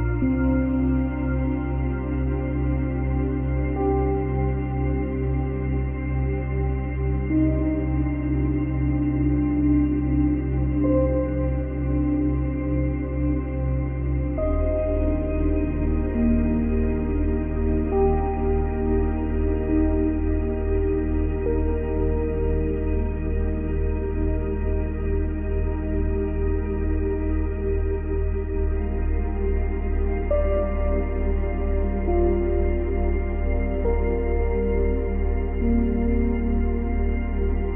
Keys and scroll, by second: 4.9 space, 6.0 space, 7.0 ctrl+x, 7.4 ctrl+c, 8.1 ctrl+v, 8.7 ctrl+v, 11.1 space, 13.6 space, 19.4 ctrl+z, 31.2 ctrl+z, 32.7 ctrl+z.